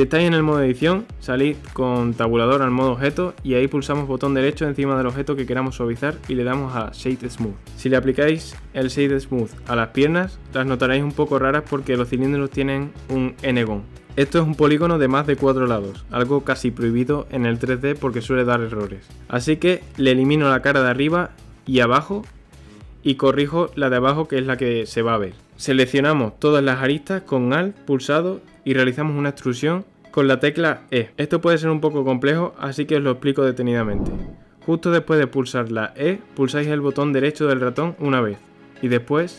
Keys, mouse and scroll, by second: 2.3 click, 3.6-5.3 middle drag, 5.3-9.3 right drag, 9.3 click, 9.9-11.9 right drag, 11.9-12.5 scroll up 1, 12.5-13.7 shift+middle drag, 13.7 click, 14.3-17.3 right drag, 19.0 ctrl+z, 19.7 middle click, 20.4-21.1 scroll up 1, 21.1-21.6 shift+middle drag, 21.6 click, 22.7 middle click, 22.9 Tab, 23.6 Delete, 25.9 click, 26.8 alt+click.